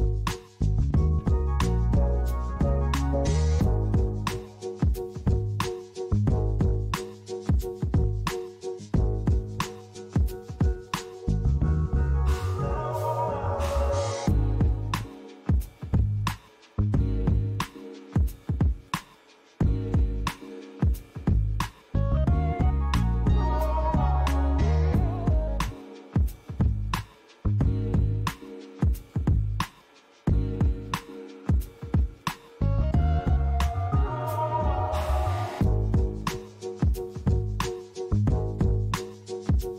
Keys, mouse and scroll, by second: 2.0 middle click, 5.4 Tab, 5.9 middle click, 7.7 click, 8.8 click, 9.5 middle click, 10.8 click, 12.4 i, 15.7 click, 16.3 middle click, 18.4 Tab, 19.2 right click, 21.2 middle click, 23.8 Tab, 24.3 middle click, 27.0 ctrl+r, 28.3 right click, 28.9 middle click, 30.8 ctrl+r, 31.6 right click, 32.1 middle click, 33.0 ctrl+r, 33.7 right click, 34.2 middle click, 35.1 ctrl+r, 35.9 right click, 36.5 middle click, 37.6 ctrl+r, 38.3 right click, 38.7 middle click, 39.6 ctrl+r.